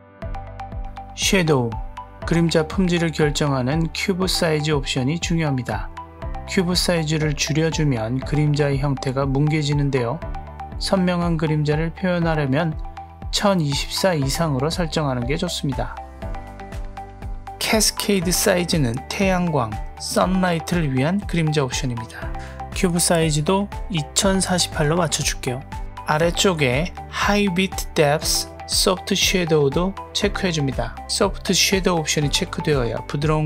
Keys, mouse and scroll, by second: 0.6 drag, 0.9 scroll down 1, 2.3-6.4 drag, 10.4-15.3 drag, 19.1-22.5 drag, 23.2-24.6 drag, 29.1 click, 31.7 click.